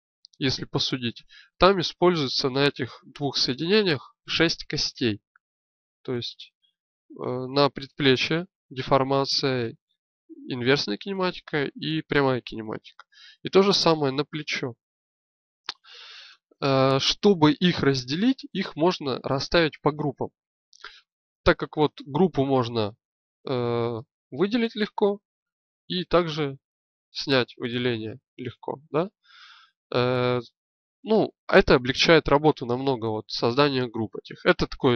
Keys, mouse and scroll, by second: 23.0-30.9 drag.